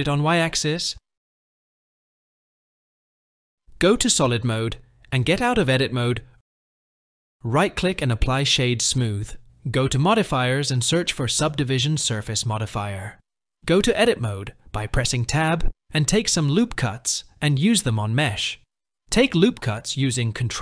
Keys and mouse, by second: 3.5 z, 6.2 Tab, 9.1-12.5 drag, 13.4 Tab, 14.8 ctrl+r, 17.9 ctrl+r, 19.8 KP_1.